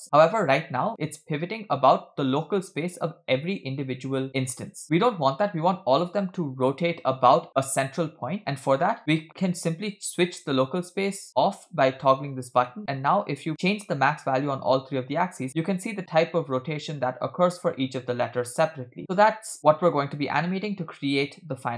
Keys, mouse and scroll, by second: 4.3 middle click, 4.3 scroll down 2, 4.6 click, 4.8 click, 8.4 middle click, 11.3 click, 12.6 middle click, 13.5-21.7 shift+drag.